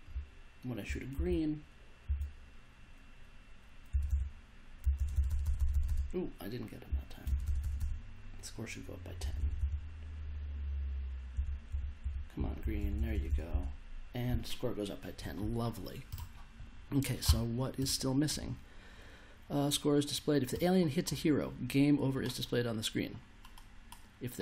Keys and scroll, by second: 0.1 w, 3.9 space, 4.8 s, 4.9 space, 5.1 s, 6.8 w, 7.2 space, 9.1 space, 11.3 space.